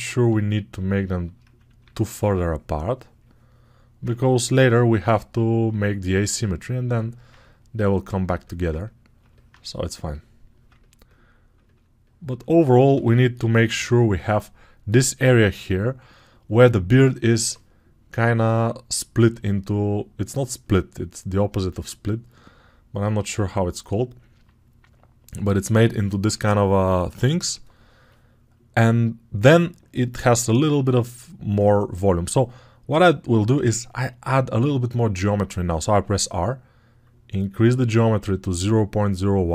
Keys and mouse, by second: 0.2-7.2 shift+drag, 1.7 2, 7.2-9.8 ctrl+right drag, 9.8-16.7 alt+drag, 10.3 ctrl+alt+right click, 12.8 g, 13.5 ], 13.6 ], 16.7-23.3 right drag, 23.3 alt+click, 24.2-35.8 right drag, 35.8-39.5 drag, 35.8 r.